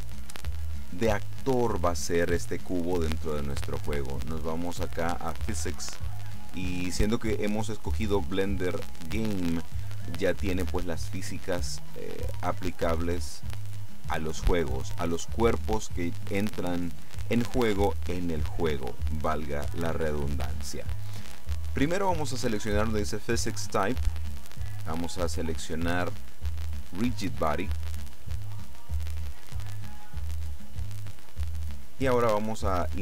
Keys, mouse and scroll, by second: 5.9 click, 24.5 click, 27.3 click.